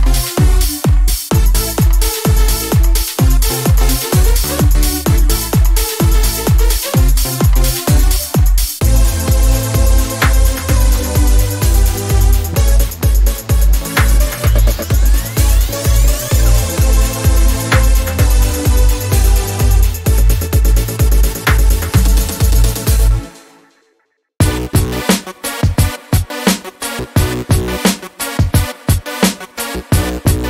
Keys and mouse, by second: 1.3-2.1 middle drag, 4.2 middle click, 4.9 Tab, 6.5 shift+a, 9.5 KP_1, 11.3-12.5 drag, 12.5 Tab, 12.9 click, 14.3-15.9 drag, 16.0 click, 16.9 Tab, 22.5-30.4 drag.